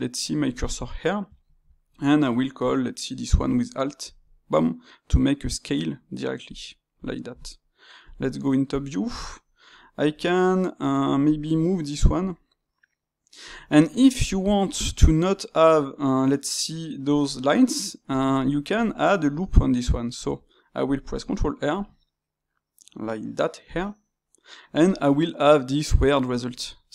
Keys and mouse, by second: 0.0-1.4 shift+right drag, 7.0-8.0 drag, 8.0 KP_7, 9.9 g, 11.2-12.2 drag, 12.2 g, 14.1-18.7 middle drag, 18.7 click, 20.2 Tab, 21.7 ctrl+r, 26.1-26.9 middle drag.